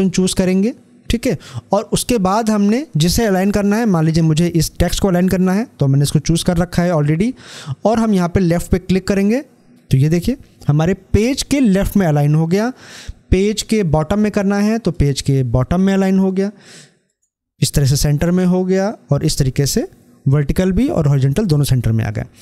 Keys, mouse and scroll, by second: 8.8 click, 14.6 click.